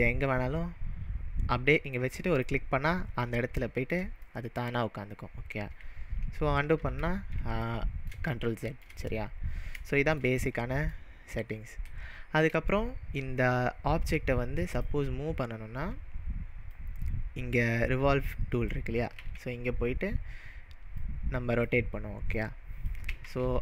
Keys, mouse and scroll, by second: 2.3 click, 3.3-7.0 middle drag, 6.8 ctrl+z, 7.7-9.2 middle drag, 9.2-9.8 scroll up 3, 10.0-14.7 shift+middle drag, 14.8-17.3 drag, 19.2 ctrl+z, 21.0 click, 22.4 click, 23.3 ctrl+z.